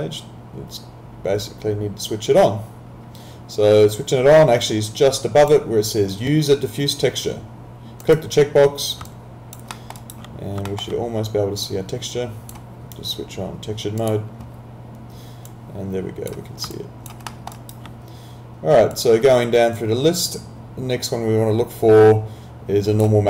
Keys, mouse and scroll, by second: 4.6 click, 8.1 click, 9.7 alt+middle click, 10.0 alt+right click, 10.7 alt+middle click, 11.7 click, 17.1 alt+click, 17.3 alt+middle click, 17.5 alt+right click, 18.9 click.